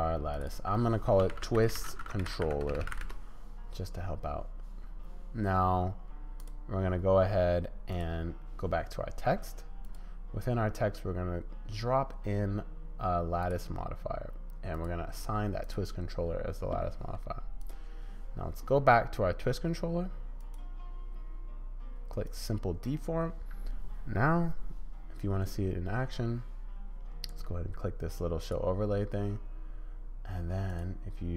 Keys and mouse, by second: 0.3 click, 0.5-3.5 drag, 2.8 l, 6.4 click, 13.5-14.9 middle drag, 15.7-20.4 middle drag, 22.4-28.5 middle drag, 30.8 middle click.